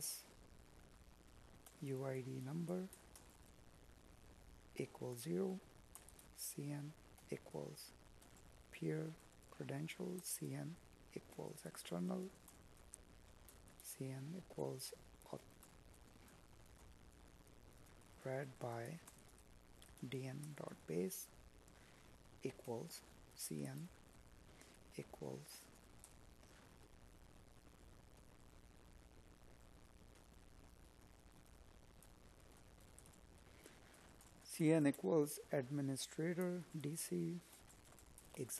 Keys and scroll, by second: 10.4 space, 11.2 space, 11.8 space, 36.4 space, 38.1 space.